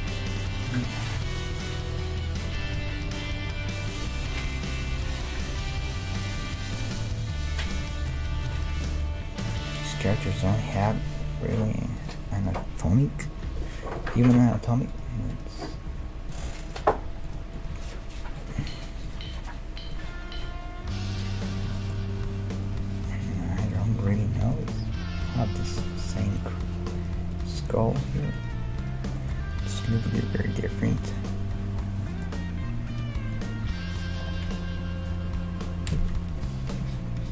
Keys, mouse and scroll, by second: 1.0-9.4 right drag, 1.2 g, 2.4 g, 4.9 g, 7.8 g, 9.1 g, 9.9-14.2 right drag, 10.4 ctrl+Tab, 11.2 g, 13.4 alt+m, 14.9-20.8 right drag, 15.1 g, 15.9 g, 16.8 g, 17.7 g, 19.3 g, 20.4 g, 21.8-23.6 middle drag, 22.7-30.2 right drag, 24.8 g, 26.4 g, 27.6 g, 28.5 g, 29.2-30.4 middle drag, 33.0 d, 33.3-35.2 drag, 34.2 d, 34.6 d, 36.4-37.3 d, 36.9-37.3 drag.